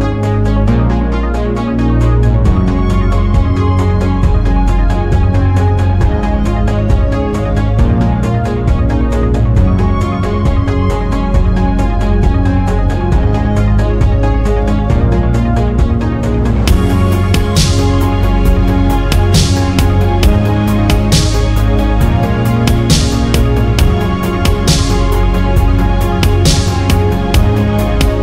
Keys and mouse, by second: 0.8-1.5 drag, 2.2 shift+click, 2.9 g, 5.2 click, 6.0 click, 7.2 click, 8.9 click, 9.8 click, 17.4-20.0 drag, 21.5-23.0 drag.